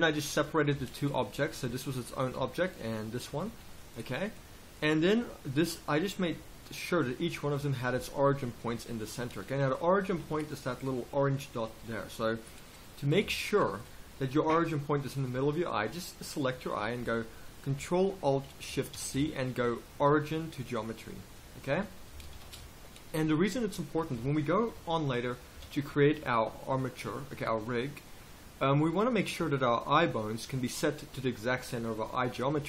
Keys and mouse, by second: 0.7 Tab, 1.6 z, 1.8 right click, 2.3 g, 3.1 right click, 3.5 g, 7.5 z, 10.1 z, 13.2 z, 16.2 click, 18.9 ctrl+alt+shift+c, 21.4 right click, 22.3 ctrl+alt+shift+c, 24.1 a, 25.5 KP_1.